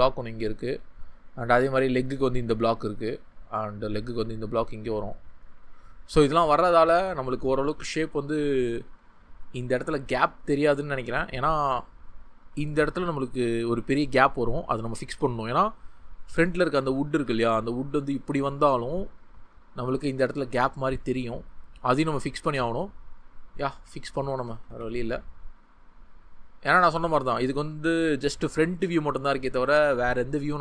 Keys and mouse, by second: 12.8-16.5 drag, 17.1 ctrl+z, 20.2-22.6 drag, 23.4-30.4 ctrl+z.